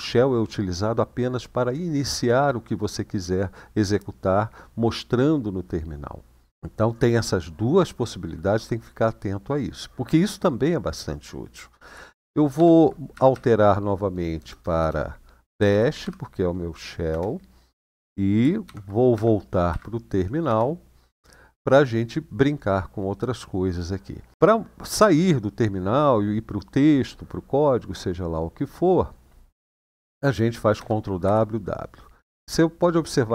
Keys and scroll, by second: 12.3 :, 12.9 Up, 13.1 Up, 14.1-15.8 typing, 16.9 Return, 18.4-20.7 typing, 18.9 Up, 30.5 ctrl+w, 31.0 ctrl+w.